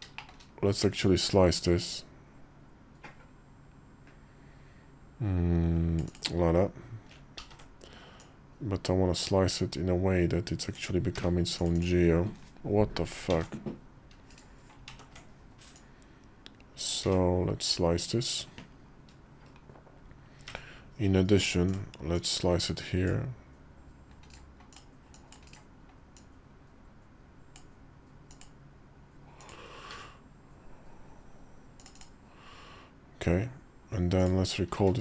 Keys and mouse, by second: 0.8-5.9 drag, 7.2 ctrl+z, 8.0-11.6 drag, 13.1 ctrl+z, 14.1 right click, 14.7 ctrl+z, 15.5-17.5 drag, 20.2 d, 21.9 click, 24.5 click, 25.9-27.3 drag, 34.0 click, 34.5 q.